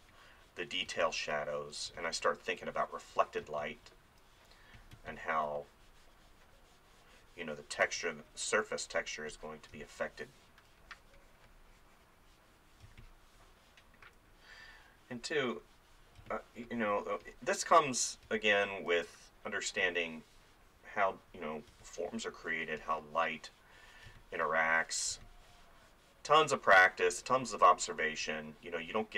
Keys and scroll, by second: 3.5 space, 4.9 space, 7.8 space, 9.8 space, 12.9 space, 16.2 space, 18.3 space, 18.8 ], 21.7 space, 24.1 space.